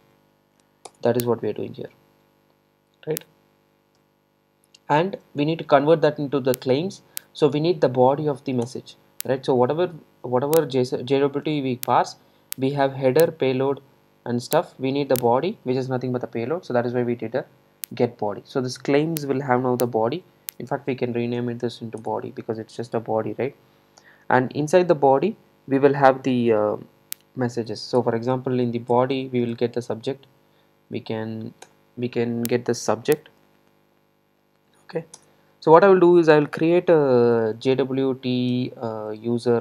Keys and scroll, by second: 8.7 Return, 22.0 Return, 29.0 Return.